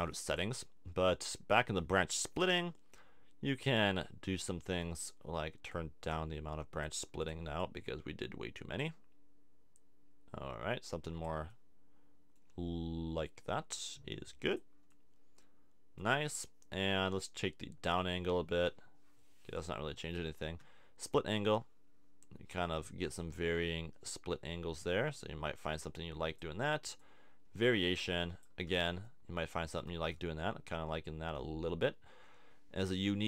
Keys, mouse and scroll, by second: 13.2-14.9 middle drag, 15.2-17.6 middle drag, 19.4-21.1 middle drag, 28.8-32.1 middle drag.